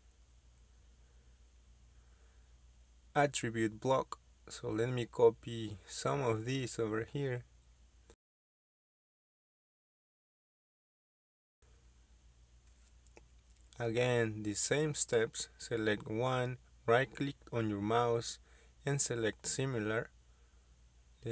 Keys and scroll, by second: 4.3 m, 4.4 space, 8.0-9.0 typing, 11.9 space, 12.0 Escape.